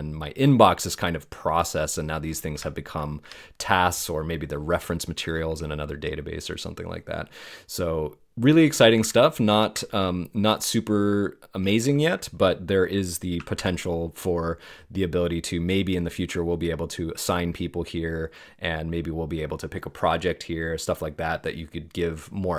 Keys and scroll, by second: 3.2 BackSpace, 9.0 super+Tab, 13.5 alt+o.